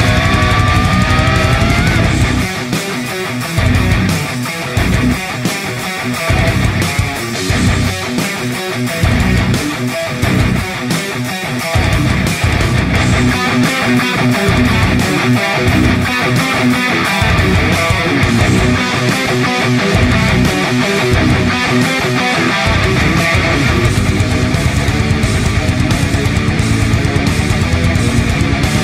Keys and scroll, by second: 2.2 ctrl+j, 4.0-4.9 typing, 6.2 typing, 8.3 space, 8.8 space, 8.9 space, 11.1 space, 17.4 space.